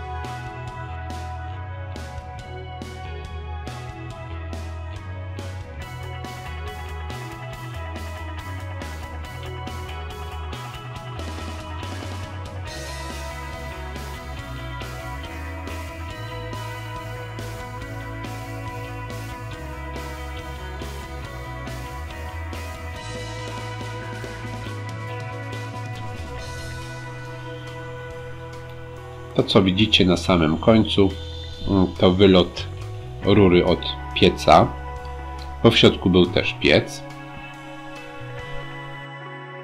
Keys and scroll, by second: 0.7 ctrl+v, 6.7 ctrl+c, 12.8 ctrl+c, 29.2 ctrl+c.